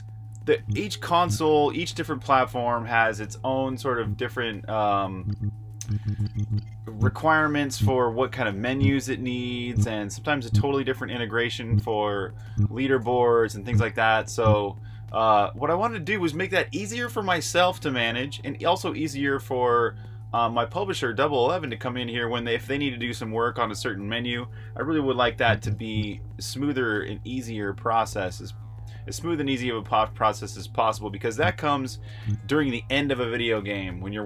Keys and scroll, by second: 0.4-1.0 typing, 3.7-7.7 typing, 25.2-25.7 typing, 31.1 Escape, 32.0 typing.